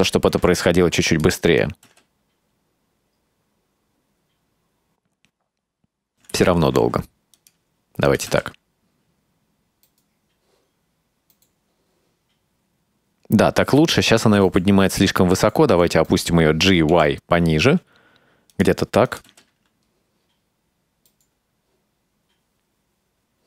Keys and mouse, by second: 0.4 g, 1.7 click, 2.0 space, 6.3 space, 6.8 g, 8.2 click, 8.4 space, 14.4 space, 15.8 g, 19.2 click, 19.4 space.